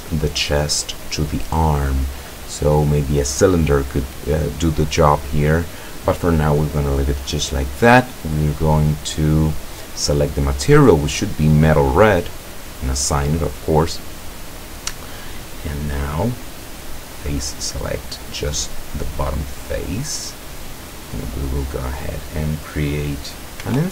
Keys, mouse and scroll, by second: 7.6 click, 11.6 click, 12.6 click, 15.0-16.2 middle drag, 17.2 click, 18.3 right click, 19.7 middle click, 20.3 middle click, 20.7-22.0 middle drag, 23.6 i.